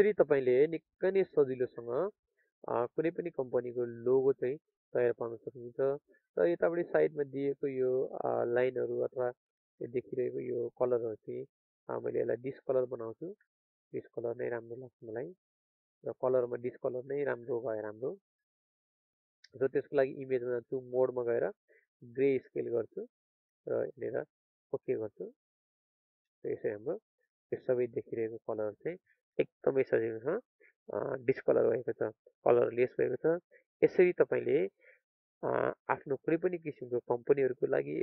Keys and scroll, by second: 34.3 ctrl+space, 35.8 ctrl+alt+space.